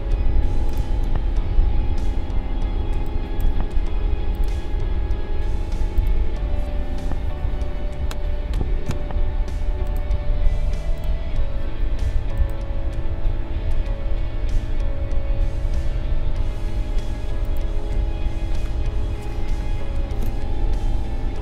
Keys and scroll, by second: 2.8 space, 8.8 a, 20.7 i.